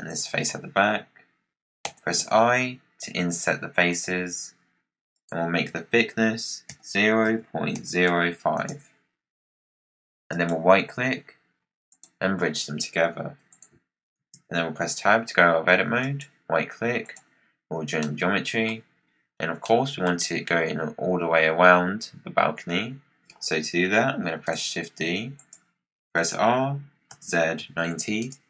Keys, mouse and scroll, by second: 5.0-8.2 drag, 10.2-13.4 right drag, 13.4 click, 14.1 Tab, 15.9-17.9 right drag, 17.9-18.9 middle drag, 18.9-19.5 scroll down 7, 19.5-22.3 middle drag, 22.3-24.3 scroll up 5, 24.3 shift+d, 26.1 r.